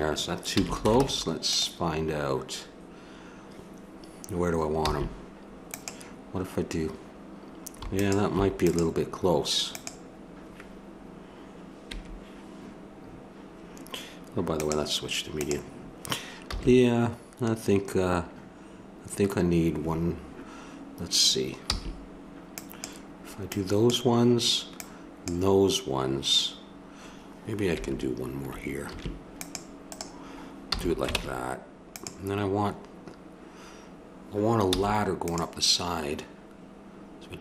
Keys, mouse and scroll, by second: 0.5 a, 1.0 ctrl+Tab, 4.8 c, 14.5-16.3 drag, 16.5 a, 21.7 c, 28.9 ctrl+r, 30.7 a, 31.1 ctrl+Tab, 34.7 c.